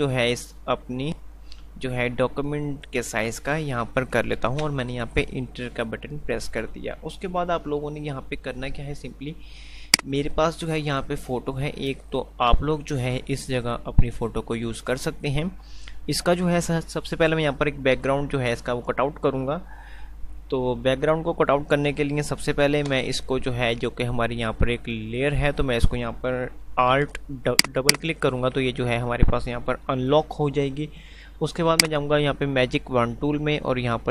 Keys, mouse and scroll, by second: 10.2 click, 31.0 F5, 32.0 click.